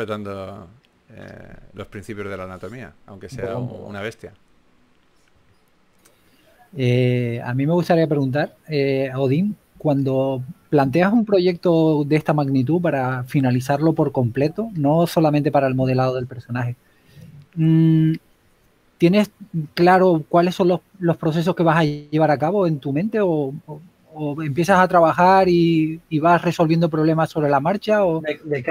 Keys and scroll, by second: 2.2 typing, 6.2-7.8 typing, 12.7 s, 16.2-17.9 typing, 19.0 typing, 20.3 typing, 23.6-24.1 typing, 25.3 super+z, 25.8 s, 27.0-27.6 typing.